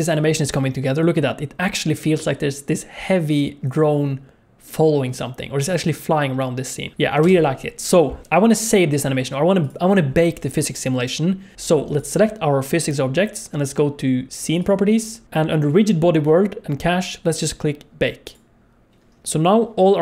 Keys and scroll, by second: 7.5 space.